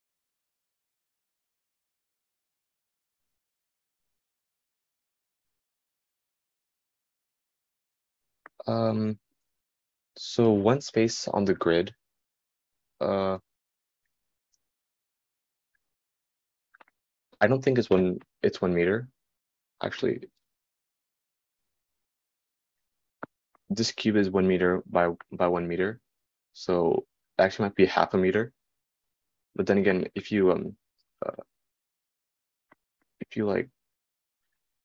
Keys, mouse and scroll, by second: 1.4-34.5 right drag.